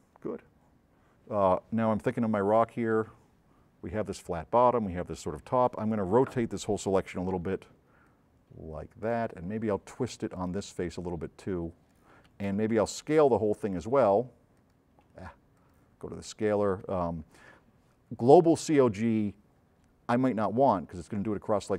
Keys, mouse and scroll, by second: 7.5 c, 8.1 click, 12.6 v, 13.3 middle click, 16.9 v, 19.5 middle click.